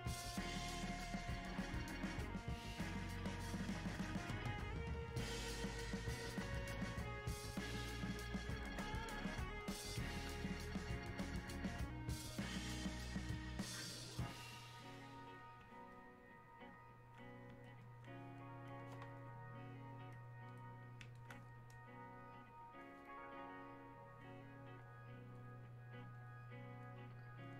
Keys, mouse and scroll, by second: 17.8 click, 21.2-24.9 alt+drag.